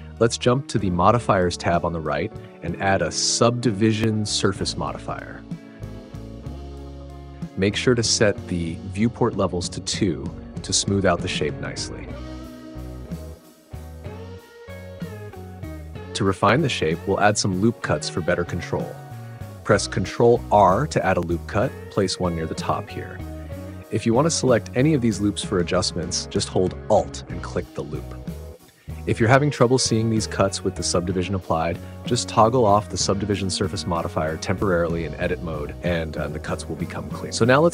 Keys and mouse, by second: 3.0-6.7 drag, 10.9 click, 14.6 Tab, 17.6-19.8 middle drag, 20.2 ctrl+r, 20.9 click, 24.4 click, 27.5 alt+click, 32.9 click.